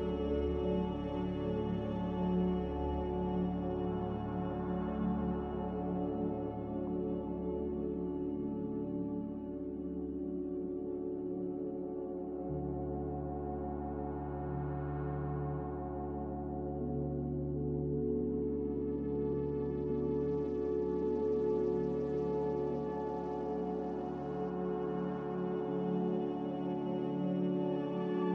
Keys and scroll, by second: 0.3-1.1 typing, 8.7-9.7 typing, 10.8-11.5 typing, 14.3 a, 25.7-26.7 typing.